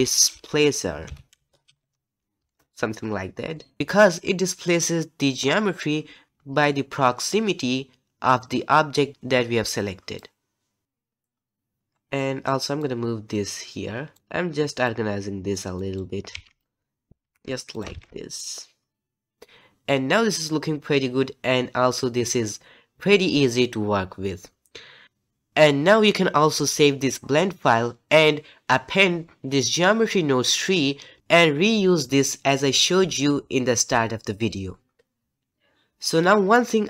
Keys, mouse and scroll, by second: 3.8 click, 17.1 shift+=.